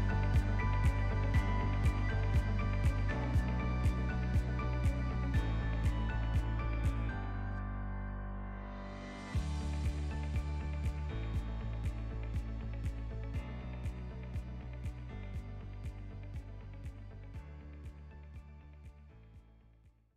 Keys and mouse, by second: 0.9-1.3 ctrl+middle drag, 1.9 click, 2.5 click, 3.9-4.2 ctrl+middle drag, 4.5 ctrl+s, 4.9-5.5 shift+middle drag, 6.3-7.1 drag, 7.5 click, 9.3-10.5 drag, 12.1-14.2 drag, 14.9 shift+middle click, 17.1 click, 18.2 click.